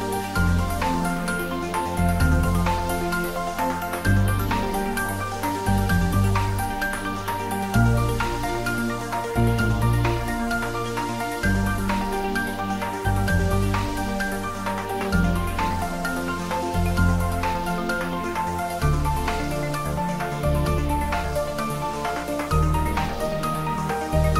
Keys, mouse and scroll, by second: 0.5-0.9 scroll up 1, 1.8-2.4 middle click, 2.6-3.6 middle drag, 5.0-5.4 scroll up 1, 7.1-7.4 scroll up 2, 8.6 click, 10.3 scroll down 1, 11.2-12.2 middle click, 12.4-12.7 scroll up 1, 13.4 click, 13.8 Tab, 14.2 click, 15.3 alt+shift+click.